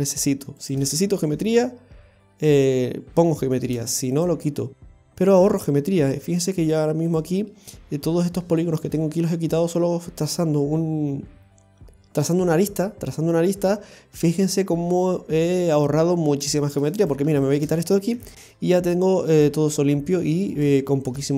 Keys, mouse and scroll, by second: 0.6 shift+right click, 2.5 i, 4.1 click, 5.0 right click, 6.1 x, 16.9 right click, 17.4 shift+right click, 18.1 x, 19.1-19.6 scroll down 1, 19.6 middle click, 20.8 shift+middle click.